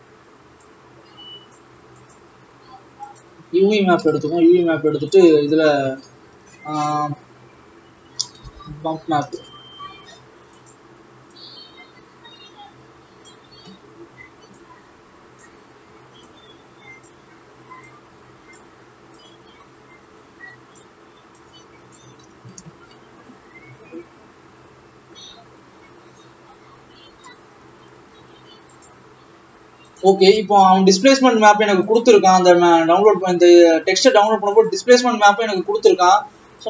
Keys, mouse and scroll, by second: 1.5 click, 2.5-4.5 drag, 4.8-11.6 drag, 14.5-16.2 drag, 17.4 click, 19.2 click, 19.5 click, 22.2 click, 26.4-26.7 scroll up 6, 29.0-29.3 scroll down 4, 29.9 scroll down 1, 36.1 click.